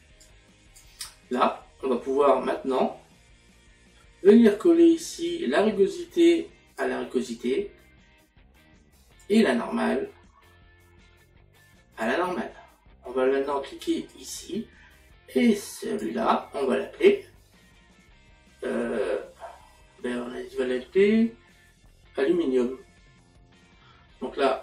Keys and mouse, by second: 1.4 click, 9.2 click, 14.1 click.